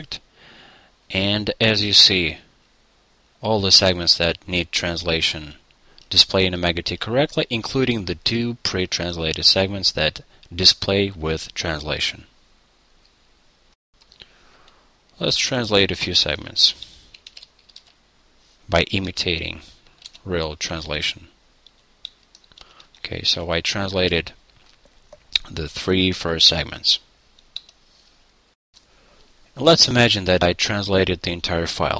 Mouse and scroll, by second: 0.0 click, 0.4-1.8 middle drag, 0.4-0.8 scroll, 2.4-4.0 middle drag, 2.4 scroll, 5.9 middle click, 6.1-8.7 middle drag, 8.9-10.0 middle drag.